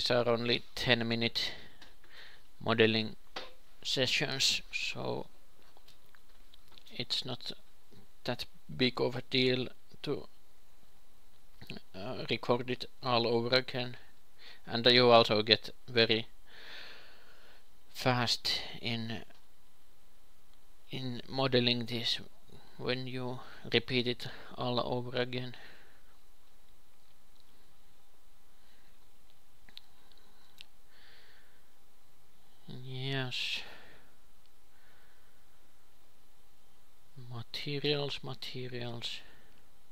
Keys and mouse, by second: 2.4-4.8 drag, 4.8 ctrl+l, 5.4 ctrl+l, 5.9 a, 9.7 shift+d, 11.2 g, 13.7 s, 15.0 ,, 15.2 s, 16.8 g, 21.6-25.6 drag, 26.7 ctrl+l, 26.7 click, 29.8 click, 30.8 ctrl+l, 32.4 a, 36.0 click, 38.3 middle click, 39.2-39.9 drag.